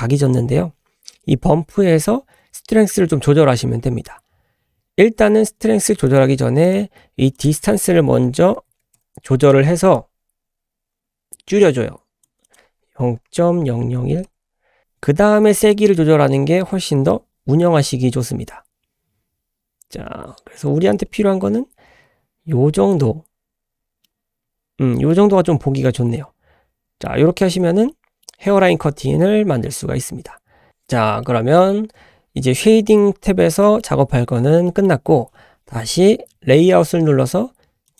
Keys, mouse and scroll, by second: 0.4-0.9 scroll up 2, 0.9-3.4 scroll down 1, 6.1 click, 7.3-9.4 drag, 10.0-12.2 shift+drag, 12.4-14.6 drag, 13.8 KP_0, 15.7-23.0 drag, 23.4 scroll down 1, 24.1-25.1 middle drag, 25.9-27.2 middle drag, 27.4 scroll up 1, 27.9 shift+middle click, 29.4-30.1 scroll down 1, 30.4-30.8 scroll down 2, 30.7 click, 30.9 scroll up 1, 31.2 shift+middle click, 33.2-33.5 scroll down 3, 33.6 middle click, 34.0-34.7 scroll down 2, 34.7 middle click.